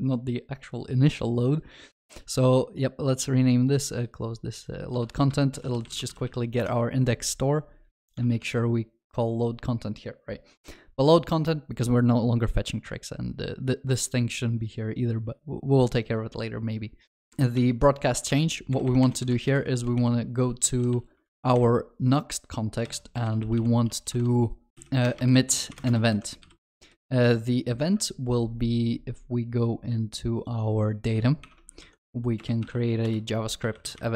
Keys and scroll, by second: 5.0 ctrl+c, 5.6 ctrl+shift+n, 8.2 ctrl+v, 8.5 ctrl+s, 31.5 alt+Insert.